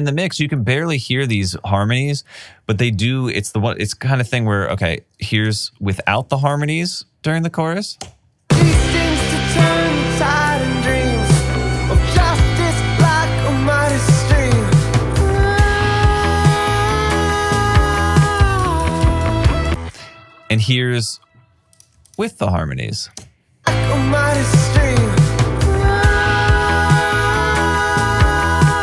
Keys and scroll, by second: 3.7 super+s, 8.4 alt+shift+space, 19.8 space, 23.6 space.